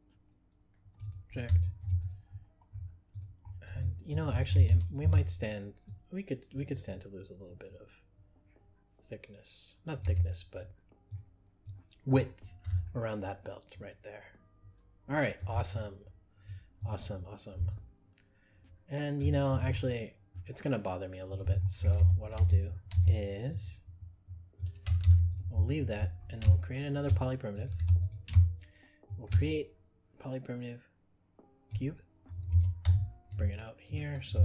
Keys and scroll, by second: 25.0 ctrl+z.